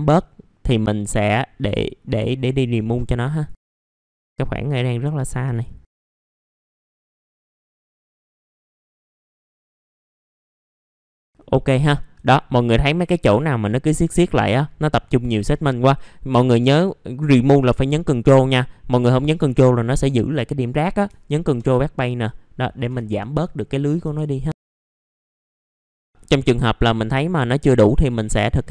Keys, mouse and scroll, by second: 0.2 middle click, 1.2-1.6 scroll up 1, 2.0-3.5 alt+drag, 3.6-4.0 scroll down 2, 3.6 middle click, 4.0 middle click, 4.5-5.0 scroll up 1, 5.5 alt+click, 5.9 middle click, 5.9 scroll down 1, 6.1 alt+click, 6.4 scroll up 1, 6.7 alt+click, 7.0-7.6 scroll down 2, 7.1 middle click, 7.6 middle click, 7.7-8.3 scroll up 3, 8.0 alt+click, 8.2 middle click, 8.5 alt+click, 8.9 scroll down 1, 9.1 alt+click, 9.3 middle click, 9.4-9.9 scroll up 2, 9.5 alt+click, 9.9 alt+click, 10.4 scroll down 1, 10.4 middle click, 10.5 scroll up 1, 11.0 middle click, 11.0 scroll down 1, 11.3 middle click, 11.8 alt+middle click, 12.7-13.0 scroll up 1, 13.3 alt+middle click, 14.1-14.5 scroll down 1, 14.5-21.0 scroll up 1, 21.5 BackSpace, 23.9-24.5 scroll down 2, 24.0 F4, 25.0 scroll up 1, 25.6 scroll up 1, 25.7 click, 25.9 middle click, 27.2 click, 27.9 middle click, 28.1-28.7 scroll down 1.